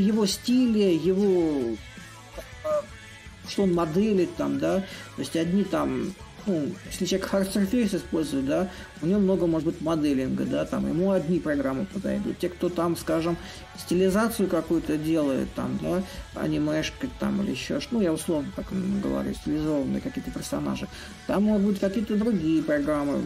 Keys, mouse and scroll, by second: 0.6-5.6 drag, 6.0-11.0 drag, 11.9-16.9 drag, 18.2-23.2 drag.